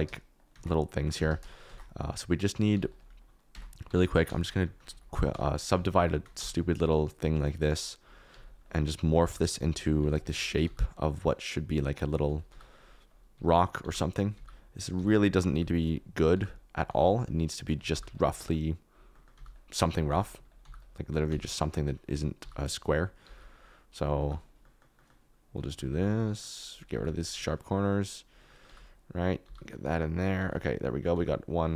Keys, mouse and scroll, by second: 0.5 shift+a, 1.6 shift+a, 2.7 g, 3.0 KP_Decimal, 3.5 Tab, 3.8 ctrl+r, 4.2 ctrl+r, 4.4 click, 4.8 1, 5.3 ctrl+r, 5.9 1, 5.9 2, 6.3 g, 8.3 g, 9.2 g, 9.5 click, 10.1 ctrl+z, 10.4 middle click, 10.6 g, 10.7 click, 11.0 middle click, 11.3 middle click, 12.2 middle click, 12.5-16.8 typing, 12.9-14.0 middle drag, 14.0 click, 14.5 click, 15.1 click, 17.2 click, 17.9 g, 18.1 click, 19.1 click, 19.3 g, 20.0 g, 20.2 click, 20.6 g, 20.7 click, 21.2 g, 21.6 click, 22.3 g, 22.6 click, 23.3 g, 23.5 click, 23.9 click, 24.1 g, 25.9 g, 26.9 g, 27.1 click, 28.3 click, 28.4 click, 28.6 g, 29.4 g, 30.4 g, 30.5 click, 31.1 g.